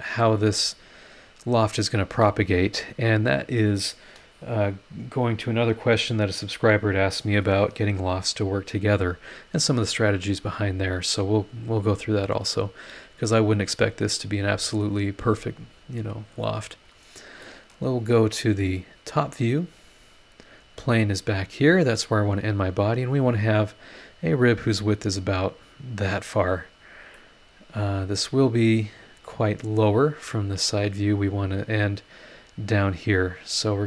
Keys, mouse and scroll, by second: 11.2 click, 17.4 middle click, 17.6 click, 17.6 right click, 18.7 click, 19.3 scroll down 2, 20.0-20.6 scroll up 4, 22.6 scroll down 2, 27.1 middle click, 28.0 click, 28.0 right click, 30.1 click, 30.8-31.1 scroll up 1.